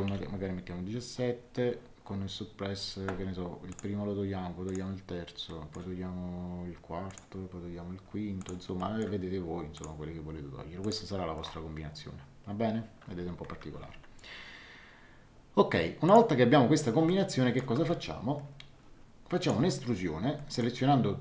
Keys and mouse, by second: 0.0 KP_1, 0.1 KP_7, 3.7 click, 5.5 middle click, 7.0 click, 8.4 click, 8.7 middle click, 9.7 click, 10.8 click, 16.0 click, 17.0 shift+middle click, 19.4 click, 20.3 shift+middle click.